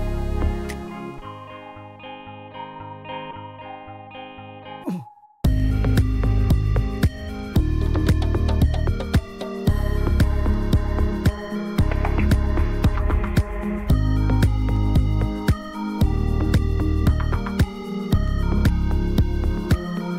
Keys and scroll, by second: 2.6 Delete, 10.4 t, 13.9-15.2 typing, 16.8-18.1 typing, 19.1 l.